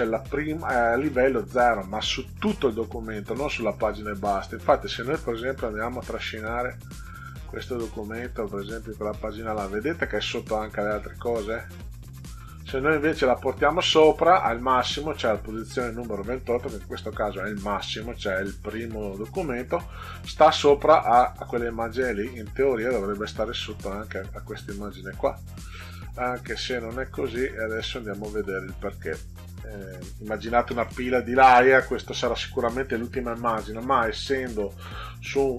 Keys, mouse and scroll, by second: 4.5 click, 5.5-8.3 drag, 10.5 scroll up 2, 10.6 click, 10.8 click, 12.5 click, 19.9-23.9 drag, 24.9-27.8 drag, 29.0 click, 34.2 click.